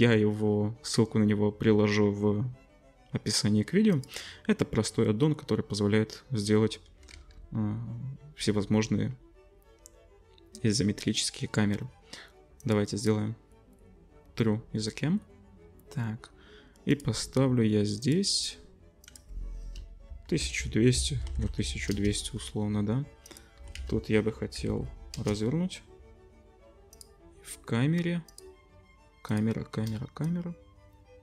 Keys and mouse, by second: 7.2 ctrl+s, 12.6-17.1 middle drag, 17.1 click, 18.1 click, 18.4 click, 20.5 0, 23.3-26.9 drag, 23.6 r, 27.0-28.3 drag, 28.3 middle click, 28.4-30.2 drag, 30.2-31.2 shift+middle drag.